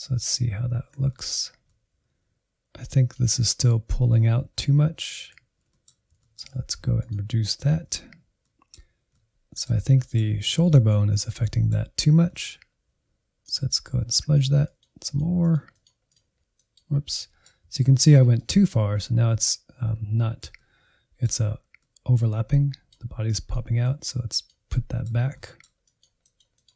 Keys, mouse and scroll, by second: 0.0 scroll down 2, 0.1-1.7 middle drag, 1.7-3.7 drag, 4.4 Insert, 4.8 middle click, 5.5-6.0 scroll up 1, 6.0 scroll up 1, 6.1 ctrl+click, 6.9-8.5 middle drag, 8.5 alt+z, 9.1-10.7 middle drag, 10.7-13.4 drag, 13.4 middle click, 14.3 alt+z, 14.4 middle click, 14.7-15.9 drag, 15.9 middle click, 16.5 click, 17.2 middle click, 18.0 ctrl+z, 18.4 click, 18.9-22.5 middle drag, 22.5-24.7 drag, 24.7 middle click, 25.6 click, 26.0 middle click, 26.2 click, 26.5 middle click.